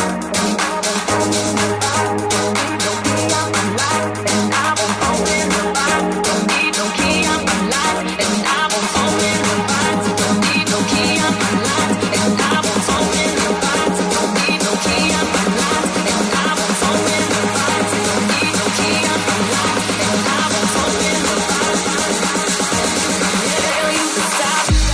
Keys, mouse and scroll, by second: 1.1 click, 1.3-3.4 middle drag, 1.3 f, 3.4-10.1 drag, 3.4 f, 15.9 Tab, 17.0 alt+z, 17.7-24.9 alt+drag, 17.8 alt+z, 19.8 alt+z, 22.9 g.